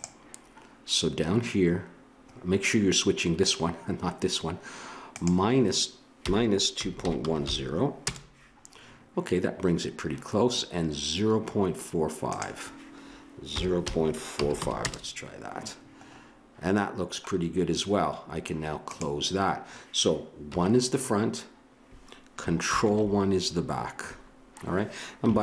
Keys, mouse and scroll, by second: 5.1-8.1 drag, 12.3-14.9 drag, 18.8-20.5 drag, 20.5 KP_1, 22.7 ctrl+KP_1.